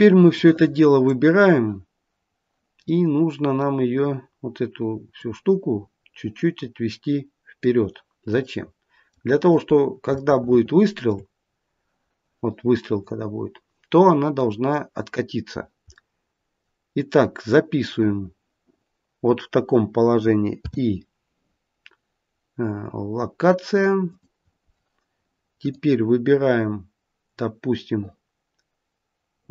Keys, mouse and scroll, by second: 0.2 click, 2.8 middle click, 3.2 middle click, 5.1 click, 8.4 middle click, 10.1 shift+middle click, 14.3 middle click, 14.5 middle click, 15.8 middle click, 16.2 middle click, 25.6 click.